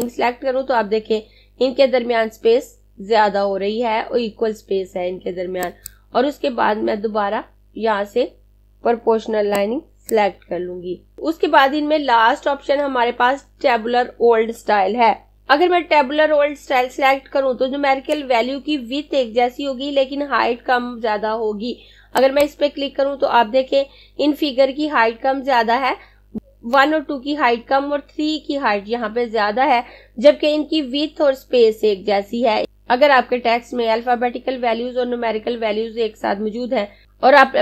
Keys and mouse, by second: 9.2 click, 22.1 click.